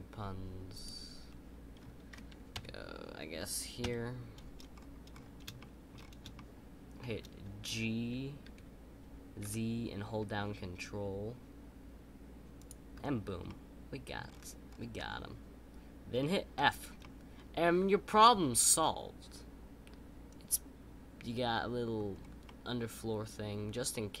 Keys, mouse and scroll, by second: 2.5 KP_1, 4.7-5.5 scroll up 4, 5.5 shift+middle click, 5.9-6.3 scroll up 2, 6.3-8.4 shift+middle drag, 13.4 middle click, 14.2-14.9 scroll down 9, 14.9-16.5 middle drag, 17.0-20.0 middle drag, 22.1-22.4 scroll up 3, 22.4-24.2 middle drag.